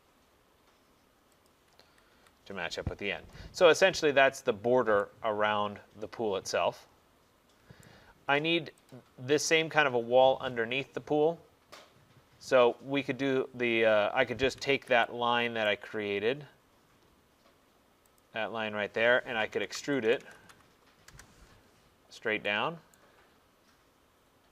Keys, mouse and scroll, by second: 0.0-0.1 typing, 1.5 click, 1.9 Escape, 2.2 Escape, 2.9 middle click, 3.0 middle click, 4.0 right click, 4.3 middle click, 4.5 middle click, 7.9 right click, 8.3 middle click, 9.0 click, 14.8 Escape, 15.7 right click, 16.1 middle click, 16.1 middle click, 16.4 middle click, 16.9 middle click, 18.3 click, 19.6-20.5 typing, 21.1 Return, 22.2 middle click, 23.0 right click, 23.2 middle click, 23.3 middle click, 24.2 middle click, 24.3 middle click.